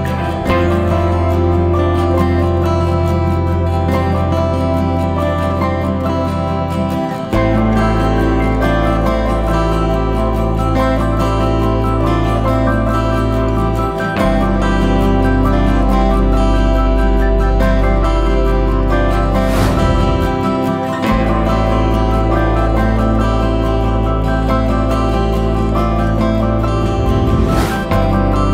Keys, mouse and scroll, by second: 0.1 l, 2.5 Left, 3.7 alt+a, 5.0 l, 8.2 Left, 9.2 alt+a, 10.6 l, 13.4 alt+a, 14.8 l, 15.8 l, 16.9 Left, 19.5 alt+a, 20.4 shift+middle click, 21.1 Tab, 21.6 alt+a, 22.1-23.1 scroll down 1, 23.1-23.6 scroll down 1, 23.6-25.1 middle drag, 23.6-24.2 scroll down 1, 25.1 click, 26.0 h, 27.0 KP_1, 27.7-28.5 scroll up 4.